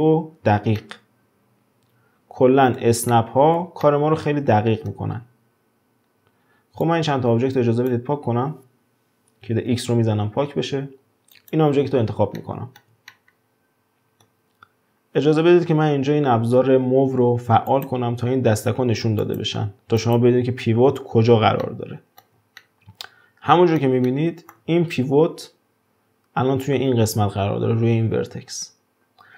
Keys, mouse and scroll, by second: 0.0-0.6 scroll up 1, 0.6 scroll up 2, 0.8-5.1 middle drag, 5.1-6.8 scroll down 1, 6.8 drag, 9.7 x, 10.6-11.3 scroll up 5, 11.3 drag, 12.4-16.1 shift+middle drag, 17.6 click, 19.2 click, 20.0 click, 20.9-21.6 scroll up 3, 21.6-24.9 shift+middle drag, 24.9-26.6 scroll down 1.